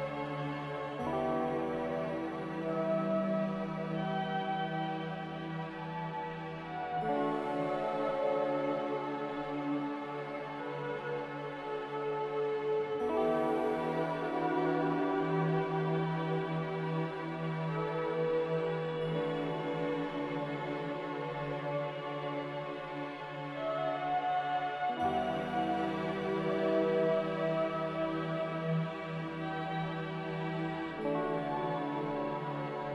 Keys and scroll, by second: 3.4 a, 18.7 ctrl+c, 27.4 Delete, 29.2 ctrl+c.